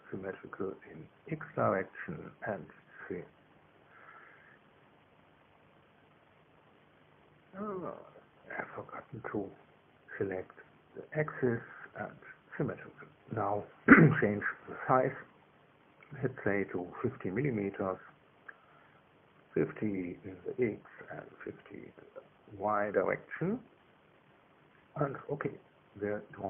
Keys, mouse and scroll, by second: 0.3 click, 2.6 click, 3.8 click, 7.3 click, 8.6 click, 10.6 click, 12.6 click, 14.5 click, 17.6 click, 19.2 KP_5, 19.3 KP_0, 19.6 KP_Enter, 21.6 click, 23.0 click, 23.8 KP_5, 24.0 KP_0, 24.2 KP_Enter.